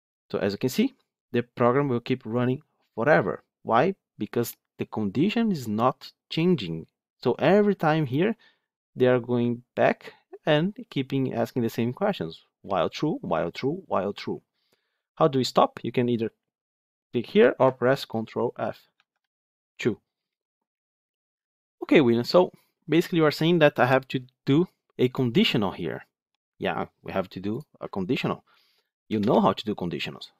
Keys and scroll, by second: 19.0 ctrl+F2.